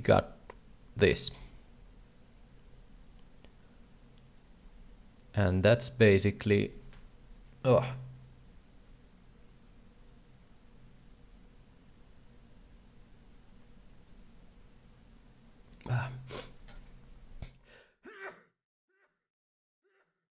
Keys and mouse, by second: 5.4 shift+click, 5.8 shift+click.